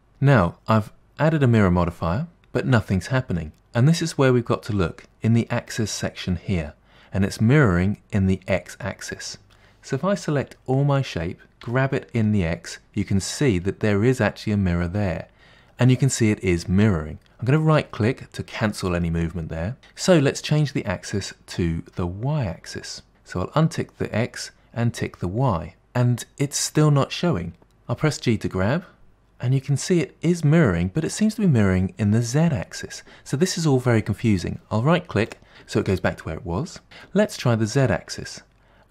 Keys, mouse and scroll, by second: 0.6-3.4 middle drag, 10.9 a, 11.7 g, 19.1 middle click, 23.1 click, 25.9 click, 28.1 g, 35.5-36.9 middle drag, 37.8 click, 38.3-38.9 middle drag.